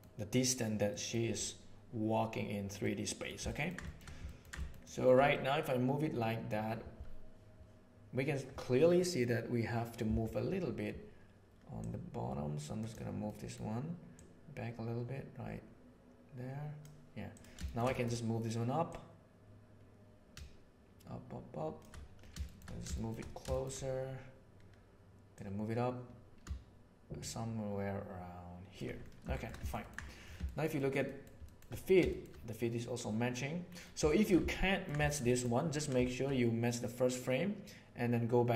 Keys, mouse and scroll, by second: 0.8 middle drag, 2.8 middle click, 3.4 ctrl+middle click, 3.8 shift+middle click, 4.2 ctrl+middle click, 4.6 shift+middle click, 4.8 shift+middle click, 5.4 middle click, 5.6 click, 11.7-12.9 drag, 13.2 middle click, 14.0-16.8 drag, 17.6 shift+middle click, 17.9 middle click, 19.0-21.9 drag, 22.5 shift+middle click, 23.0 shift+middle drag, 23.6 shift+click, 25.3 click, 25.8-28.7 middle drag, 29.3 shift+middle drag, 29.6 ctrl+middle click, 29.8 ctrl+middle click, 30.5 shift+middle click, 30.7 shift+middle click, 31.2 shift+middle drag, 31.5 shift+middle drag, 32.0 shift+middle click, 34.0 shift+middle drag, 34.4-34.8 ctrl+middle drag, 35.0 shift+middle click, 35.2 middle click.